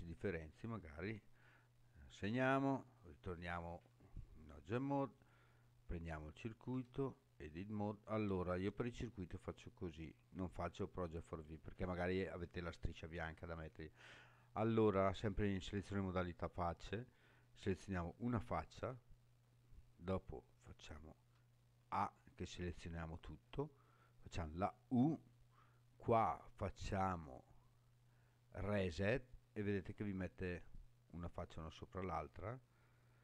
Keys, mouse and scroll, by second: 0.0 scroll down 1, 2.1 click, 3.2 Tab, 5.1 click, 6.7 Tab, 17.6 click, 24.5 u.